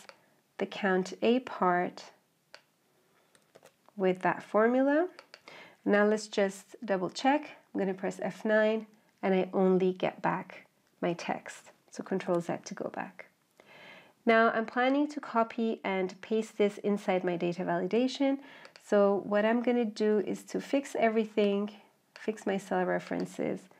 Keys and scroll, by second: 12.1 ctrl+z.